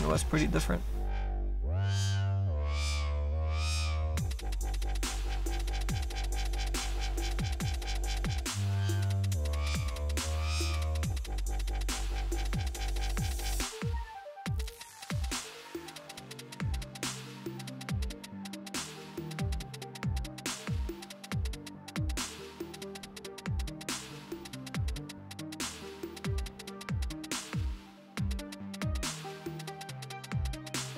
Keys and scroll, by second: 0.0 ctrl+z.